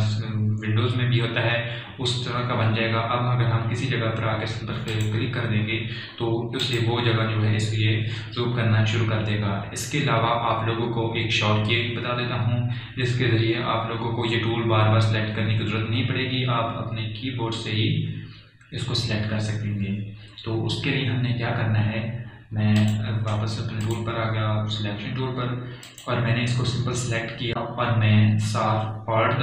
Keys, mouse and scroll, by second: 5.8 click, 23.7 click, 28.8 click.